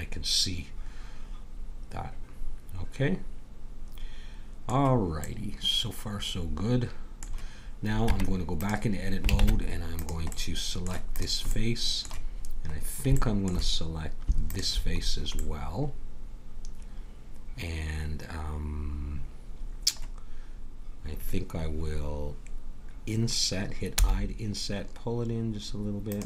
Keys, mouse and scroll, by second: 5.2-7.0 middle drag, 8.1 Tab, 9.3 ctrl+Tab, 11.1 click, 14.5-15.6 drag, 15.6-17.3 middle drag, 23.9 i.